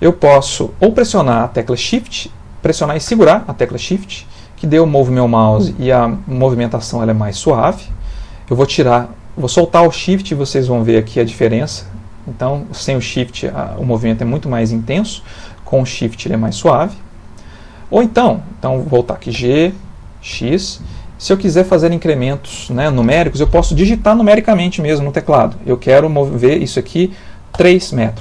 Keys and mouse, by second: 19.4 g.